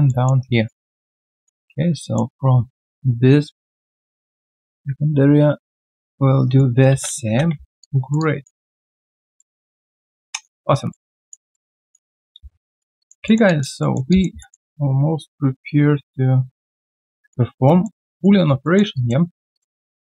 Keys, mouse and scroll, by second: 0.0 alt+middle click, 0.4 alt+right click, 1.6 alt+middle click, 3.8 ctrl+click, 5.9 ctrl+click, 6.4 alt+right click, 7.2 space, 7.8 alt+click, 8.6 alt+middle click, 9.8 alt+click, 10.6 alt+right click, 10.9 alt+middle click, 11.2 alt+click, 11.5 alt+middle click, 11.8 alt+click, 12.1 alt+middle click, 12.3 q, 12.5 right click, 13.0 alt+click, 13.2 alt+middle click, 13.4 alt+click, 13.8 alt+middle click, 14.1 alt+click, 14.4 alt+middle click, 14.7 alt+click, 17.5 alt+right click, 17.8 alt+middle click, 18.1 alt+right click, 18.6 alt+middle click, 18.9 alt+click.